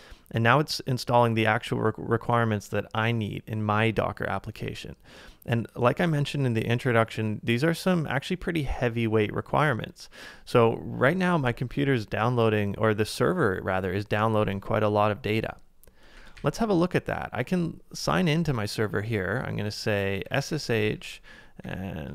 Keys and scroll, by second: 16.2 ctrl+a, 16.3 k, 20.2-21.2 typing.